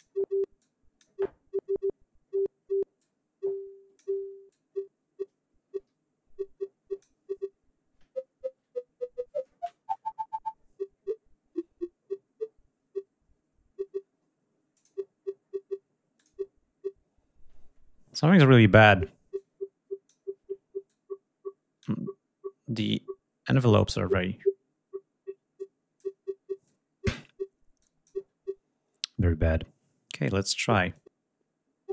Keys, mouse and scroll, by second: 0.3 click, 2.6-3.8 drag, 4.2-6.9 drag, 14.4 click, 15.8 click, 19.0 click, 20.5-21.7 drag, 22.5-23.4 drag, 23.5-25.9 drag, 26.3-27.0 drag, 27.5-27.9 drag, 30.6-31.9 drag.